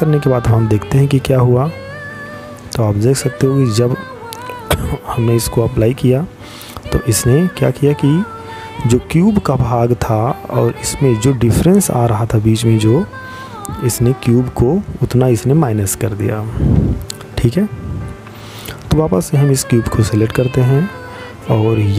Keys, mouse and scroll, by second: 18.2 right click.